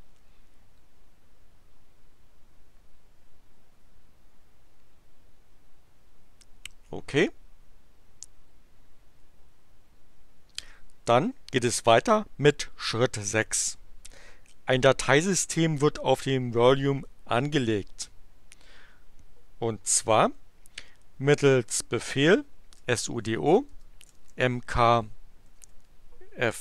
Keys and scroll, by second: 22.5-26.1 typing.